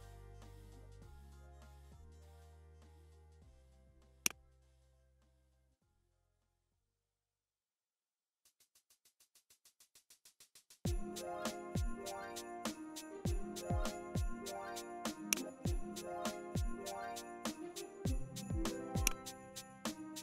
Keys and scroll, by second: 4.5 Down, 4.7 Down, 4.9 Down, 6.6 Down, 7.3 Down, 9.6 Down, 10.9 Up.